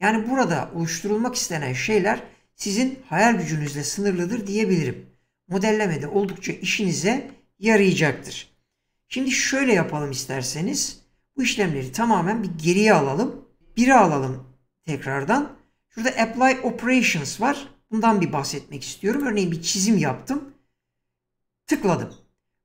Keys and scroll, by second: 11.2 ctrl+z, 13.6 1.